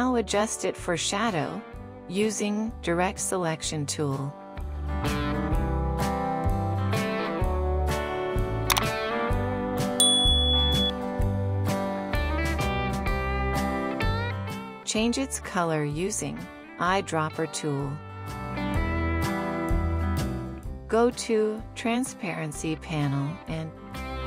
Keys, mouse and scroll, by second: 4.3 alt+scroll up 1, 13.3 double click, 15.6 ctrl+1.